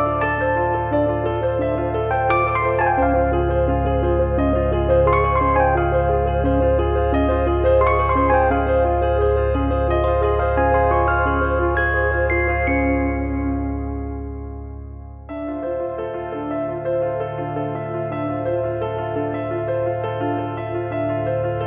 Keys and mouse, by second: 0.3 z, 0.7 click, 2.0 z, 2.1 click, 3.5 middle click, 3.9 middle click, 5.6 shift+b, 7.4 click, 8.6 click, 10.0 click, 10.8 click, 11.4 click, 12.3 click, 13.3 click, 13.8 click, 14.4 click, 15.1 click, 15.6 f, 15.9 shift+middle click, 16.4 click, 17.1 click, 17.5 e, 18.3 click, 19.2 click, 20.0 click, 20.8 click.